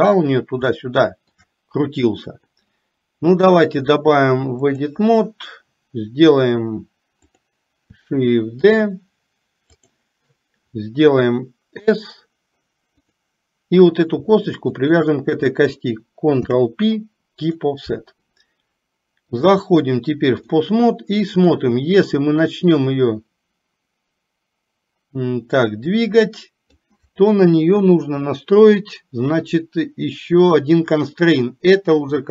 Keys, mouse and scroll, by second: 0.9-1.5 shift+middle drag, 3.5-5.0 drag, 7.5 click, 15.0 shift+click, 16.5 ctrl+p, 19.5-20.7 drag, 21.5 click, 22.9-26.9 drag.